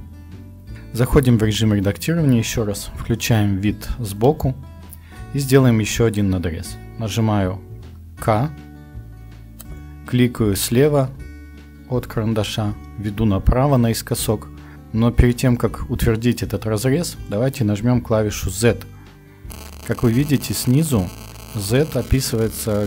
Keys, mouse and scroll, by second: 0.0 Tab, 1.1 Tab, 2.9 KP_1, 8.2 k.